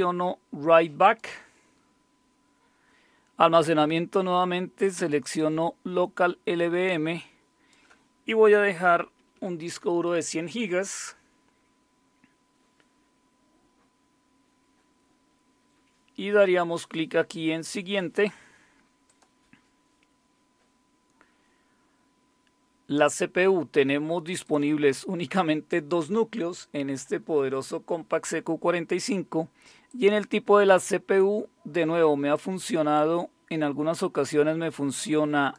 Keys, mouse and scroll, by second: 1.0 click, 3.5 click, 5.2 click, 6.9 click, 8.6-9.8 typing, 19.1 click, 24.4 click, 29.9 click, 32.3-35.5 drag.